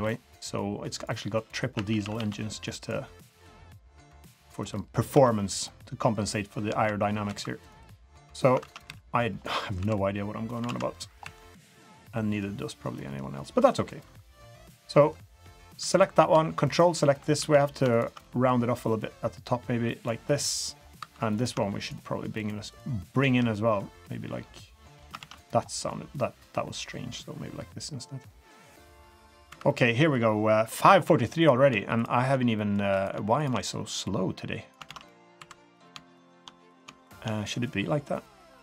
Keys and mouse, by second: 1.7 a, 1.9 a, 2.1 b, 3.4 click, 4.7-5.0 middle drag, 5.1 3, 5.4 middle click, 7.3 2, 7.6 click, 8.6 ctrl+z, 8.8 KP_3, 9.8 2, 10.6 alt+z, 10.9 drag, 11.2 2, 12.1 click, 13.0 click, 13.4 click, 14.0 2, 14.7-15.1 drag, 15.8 2, 16.7 ctrl+click, 17.4 ctrl+z, 17.9 ctrl+click, 18.2 click, 18.4 middle click, 19.0-20.0 drag, 20.3 middle click, 21.2 2, 21.8 shift+click, 22.4-22.8 shift+drag, 23.8 click, 25.2 ctrl+z, 25.3 middle drag, 26.2-29.4 drag, 29.5 3, 29.7-30.1 middle drag, 30.7 middle drag, 31.0 2, 32.5 middle click, 33.0 click, 33.5 typing, 34.0-34.7 drag, 34.9 ctrl+z, 35.1 middle click, 35.4 typing, 35.7 click, 36.2 shift+click, 36.7 click, 37.0 shift+click, 37.6-38.4 drag, 38.5-38.6 middle drag.